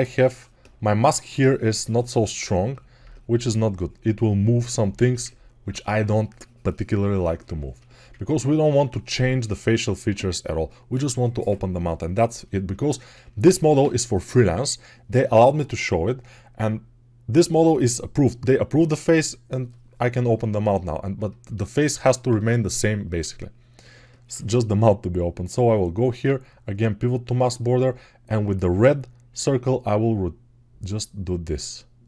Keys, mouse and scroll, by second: 26.0 q.